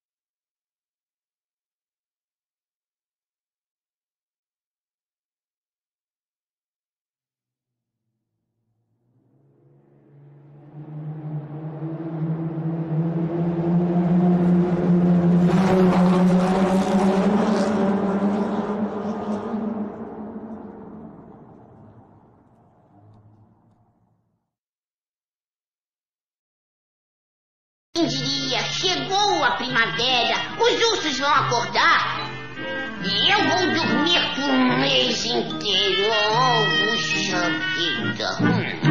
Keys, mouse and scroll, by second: 26.2 click, 27.8 click.